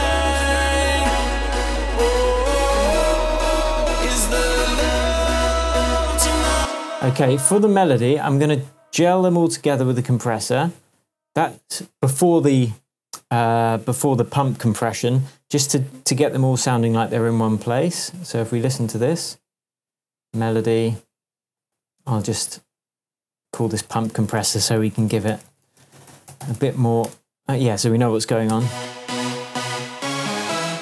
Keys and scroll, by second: 6.5 space, 24.1 super+r, 24.4 shift+super+p, 24.6-26.9 typing, 27.0 shift+Return, 27.6 Return, 28.5 space.